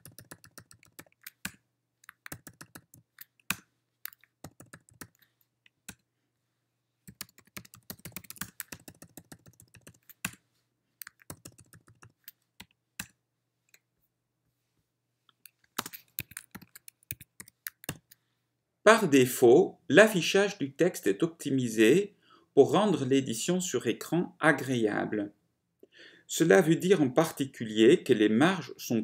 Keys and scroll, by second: 0.0 ctrl+y, 0.3 ctrl+y, 0.4 ctrl+y, 1.0 ctrl+y, 1.1 ctrl+y, 2.4 ctrl+y, 2.9 ctrl+y, 3.6 Return, 4.5 ctrl+y, 5.1 ctrl+y, 5.6 Right, 6.2 ctrl+y, 6.2 Return, 6.2 Right, 7.0-10.3 typing, 9.1 ctrl+y, 9.3 ctrl+y, 11.4-12.3 typing, 12.7 Right, 13.3 ctrl+y, 13.3 Return, 13.3 Right, 14.3 ctrl+y, 14.3 Return, 14.3 Right, 15.9 ctrl+space, 16.7-18.7 typing.